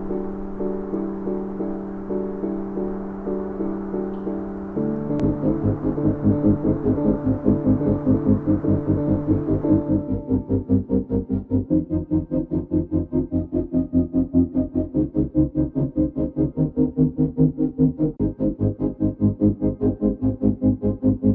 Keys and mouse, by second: 0.8 click, 3.5-4.6 drag, 3.5-4.6 right drag, 6.2 s, 8.1 Tab, 8.5-10.3 drag, 10.3-11.0 middle drag, 11.6 click, 11.9 Tab, 12.5 Tab, 13.1 alt+click, 13.7-14.7 middle drag, 16.2 middle click, 17.5 s, 18.9 Tab, 20.1-20.9 shift+drag.